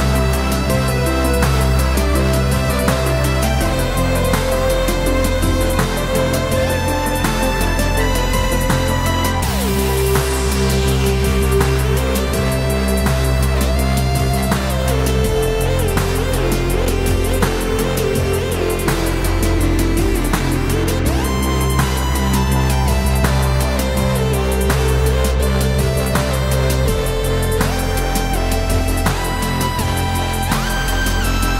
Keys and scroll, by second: 8.3 BackSpace, 8.4 5, 9.9 Return, 26.6 BackSpace, 27.2 6, 28.0 Return.